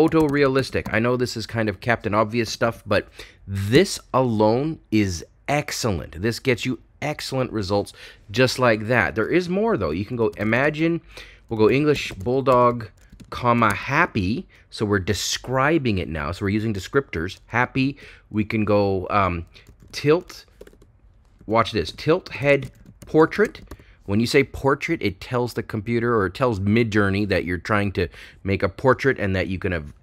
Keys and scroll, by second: 0.0-0.7 typing, 10.2-14.5 typing, 22.4-23.8 typing.